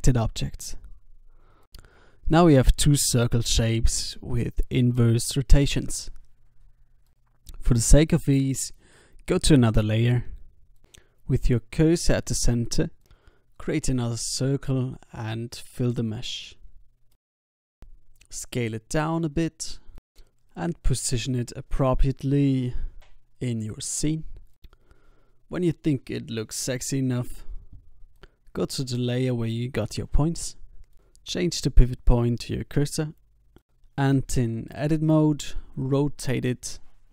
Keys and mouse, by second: 1.5 alt+a, 6.0 alt+a, 8.9 click, 9.9 click, 10.6 shift+s, 12.0 shift+a, 14.4-15.5 middle drag, 14.9 Tab, 15.8 e, 16.2 s, 17.7 a, 17.8 a, 18.0 w, 19.1 Tab, 19.6 s, 22.3-24.3 drag, 22.8 g, 25.9 s, 26.5-27.8 drag, 27.8 shift+a, 29.1-30.9 drag, 34.0 Tab, 34.5 shift+d, 36.0 r.